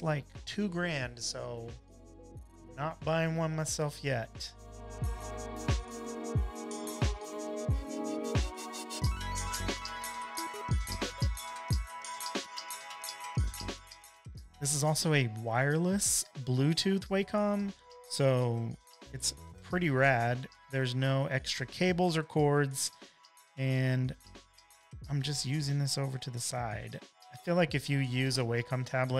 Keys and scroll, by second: 3.1 space, 10.5 super+z, 12.4 space, 12.5 space, 12.9 space, 13.0 space, 18.6 space.